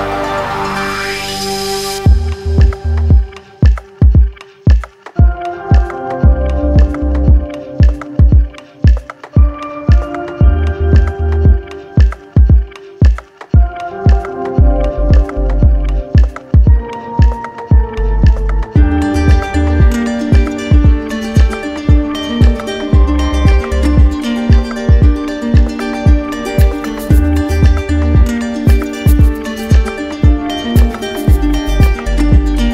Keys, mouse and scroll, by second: 0.7-1.8 drag, 2.7-3.7 drag, 7.5-8.6 drag, 11.3-12.4 drag, 13.8 click, 20.8 click, 21.7 shift+click, 22.3 click, 22.7 alt+click, 23.7 click, 25.0 click, 25.8 ctrl+z, 27.1 alt+click, 28.8 right click, 29.4 alt+right click, 30.8 right click, 31.4 right click.